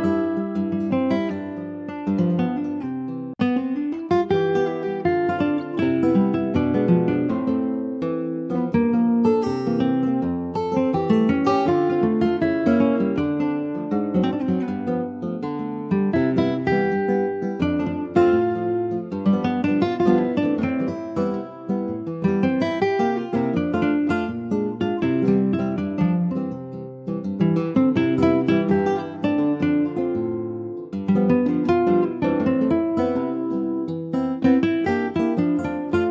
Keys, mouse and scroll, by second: 0.3 alt+middle click, 1.1 ctrl+s, 1.2 scroll down 3, 1.5 shift+middle click, 1.8-2.3 scroll down 3, 2.3 ctrl+s, 2.5 alt+middle click, 3.2 ctrl+s, 3.3 click, 3.6 shift+middle click, 4.3 ctrl+s, 4.4 click, 4.7 middle click, 5.3 ctrl+s, 5.3 click, 5.6 scroll down 3, 5.9 middle click, 6.1 ctrl+scroll up 1, 6.3 ctrl+s, 6.6 click, 7.0 alt+middle click, 7.6 shift+d, 8.2-9.3 scroll up 2, 9.3-10.6 drag, 10.6 alt+middle click, 10.9-11.3 alt+scroll up 2, 11.6 shift+middle click, 12.1 s, 13.6 alt+middle click, 14.8 middle click, 15.3 scroll up 1, 15.5 shift+middle click, 16.1 s, 19.3 alt+middle click, 19.6-20.8 alt+scroll up 1, 20.8 ctrl+s, 21.3 s, 26.0 click, 28.8 middle click, 29.2 Tab, 29.6-30.7 middle drag, 30.7-31.1 scroll up 2, 31.3 click, 31.8 middle click, 32.7 ctrl+s, 32.9-34.0 middle drag, 34.0 scroll down 3, 34.3 middle click, 34.9 ctrl+s, 35.1 click, 35.7-36.1 scroll down 1.